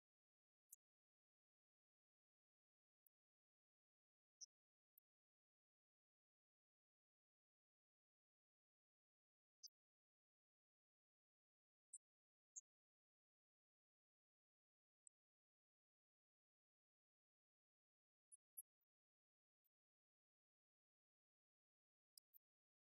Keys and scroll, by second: 4.0 Down, 4.7 Right, 5.8 Left, 6.2 Up, 14.8-17.9 typing, 22.7-22.9 typing.